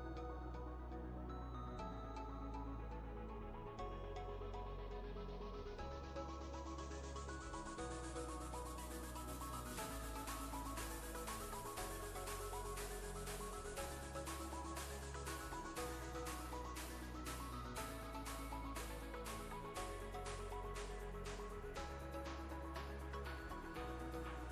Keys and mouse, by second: 10.3 v, 10.9-11.9 click, 12.4 ctrl+space, 12.5-13.1 ctrl+click, 13.2-13.8 click, 13.6 space, 14.3-17.4 drag, 17.5 ctrl+space, 17.7-18.7 ctrl+click, 18.1 ctrl+space, 19.3 click, 22.8-23.4 drag.